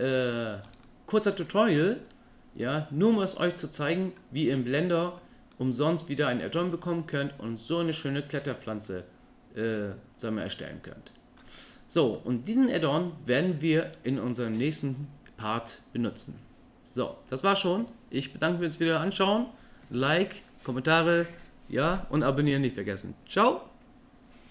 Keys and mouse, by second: 0.4 shift+middle drag, 0.8 middle click, 2.7-4.2 middle drag, 4.6-5.2 middle drag, 5.5-6.0 middle drag, 7.5-11.4 middle drag, 12.2-12.7 middle drag.